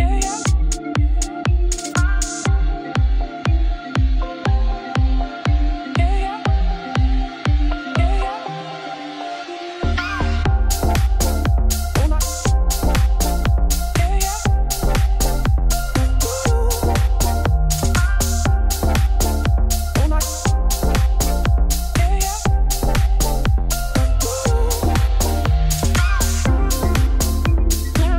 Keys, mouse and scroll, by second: 0.3-2.0 drag, 3.2 click, 3.7 Tab, 3.8 r, 6.2 click, 7.0 click, 8.3 Tab, 8.9 scroll down 8, 9.2 middle click, 10.1 click, 11.5 click, 11.8-15.3 middle drag, 15.4-15.7 scroll up 4, 15.7-16.2 scroll down 9, 16.2 middle click, 16.8-17.3 scroll up 7, 17.4-21.5 drag, 21.5 Tab, 22.4-23.7 scroll down 7, 23.7 click, 24.0 KP_Decimal, 24.3-25.0 scroll down 2, 25.0-27.1 drag, 27.1 KP_Divide, 27.6 middle click.